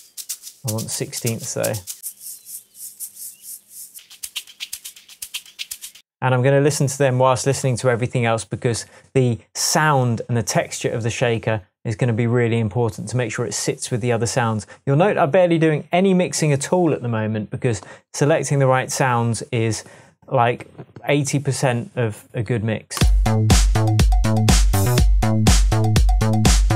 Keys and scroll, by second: 6.0 space.